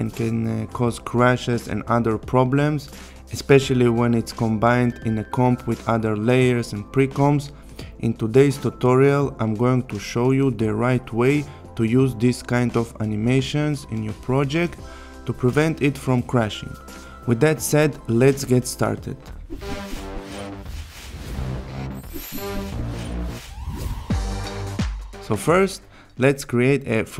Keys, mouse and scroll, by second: 6.5-7.1 click, 7.8 space, 25.9 click.